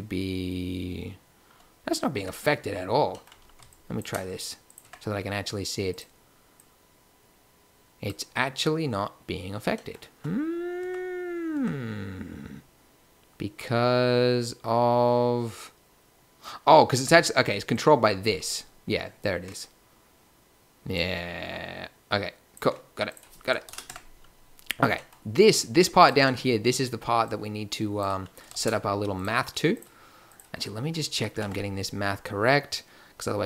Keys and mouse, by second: 2.2 Tab, 4.9 Tab, 9.0-10.8 middle drag, 10.8 Tab, 11.5 Tab, 17.0 Tab, 19.7 middle click, 23.0 click, 23.9 Tab, 24.9-26.0 drag, 28.5 shift+a.